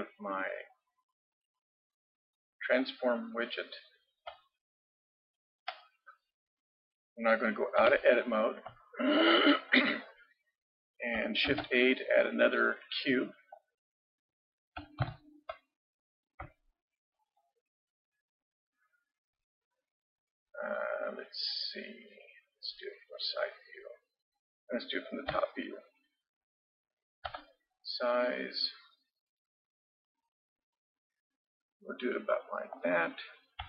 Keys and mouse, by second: 2.8-4.7 drag, 7.8 Tab, 11.5 shift+a, 15.1 ctrl+KP_3, 15.9-17.1 middle drag, 18.5 middle click, 21.2-23.5 middle drag, 25.3 KP_7, 27.3 s.